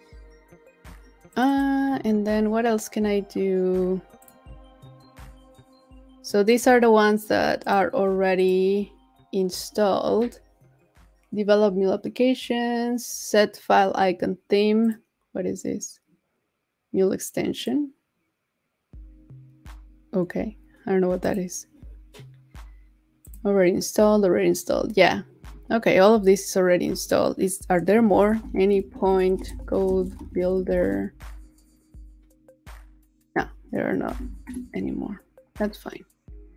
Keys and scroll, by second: 34.1 super+a.